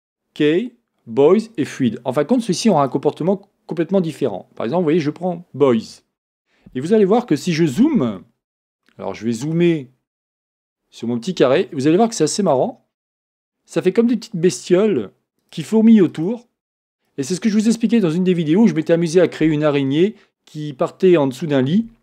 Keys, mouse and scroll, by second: 1.7-8.9 drag, 8.9-12.4 shift+middle drag, 12.4-22.0 drag.